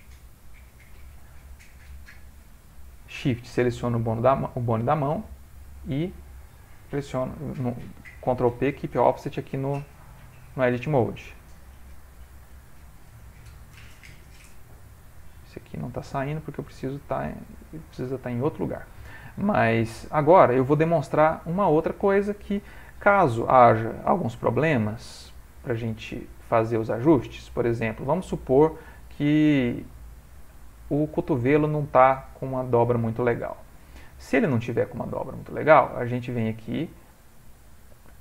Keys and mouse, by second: 0.2 Tab, 1.1 middle click, 1.2 middle click, 1.5 middle click, 2.4 Tab, 2.4 middle click, 2.8 middle click, 3.6 shift+click, 6.1 Tab, 7.6 ctrl+p, 9.3 Tab, 9.8 ctrl+middle click, 10.4 click, 11.6 g, 15.1 click, 15.9 g, 20.1 middle click, 20.8 ctrl+middle click, 20.9 ctrl+middle click, 21.1 middle click, 21.5 middle click, 22.1 ctrl+middle click, 22.7 middle click, 23.3 ctrl+middle click, 23.9 middle click, 24.8 click, 25.7 g, 32.8 middle click, 34.9 g.